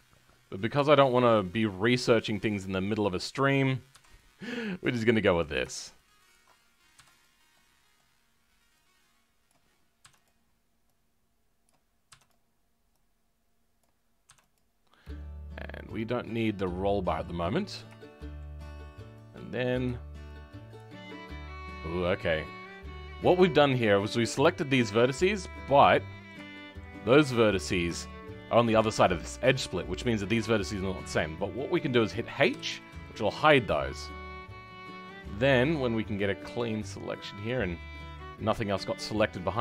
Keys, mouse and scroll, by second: 0.3-0.6 scroll up 2, 0.8-3.4 shift+middle drag, 3.4 click, 4.1 m, 7.2 m, 7.5-9.4 middle drag, 9.4 click, 11.6 click, 16.3-19.7 middle drag, 19.7 click, 25.0 scroll down 2, 25.7-26.9 middle drag, 26.9-27.3 scroll up 2, 27.3-28.6 middle drag, 28.6-29.0 scroll up 4, 29.0-32.4 middle drag, 32.4 h, 33.0-37.4 middle drag, 37.4 click, 37.6 middle click, 38.3-39.2 scroll down 2, 39.5 middle click.